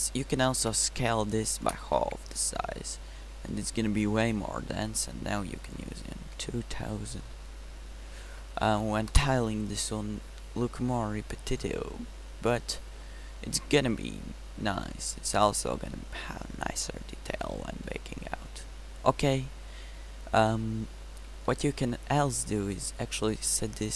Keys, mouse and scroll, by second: 0.7 s, 2.4 Tab, 6.0-8.9 middle drag, 8.9 0, 13.3-13.6 middle drag, 15.6-17.0 middle drag.